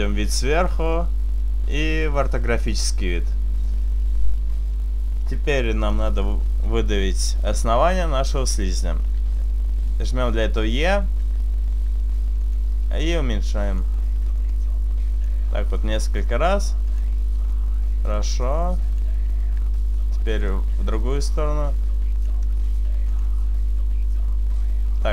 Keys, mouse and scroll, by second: 0.7 KP_7, 3.0 KP_5, 5.8 click, 6.9 right click, 9.1 e, 9.6 right click, 10.0 click, 11.4 s, 12.6 click, 13.1 click, 14.2 e, 14.4 right click, 15.4 click, 15.7 s, 17.0 click, 17.5 right click, 18.1 e, 18.4 click, 18.4 right click, 19.5 s, 20.6 click, 21.0 click, 22.8 s, 23.3 click.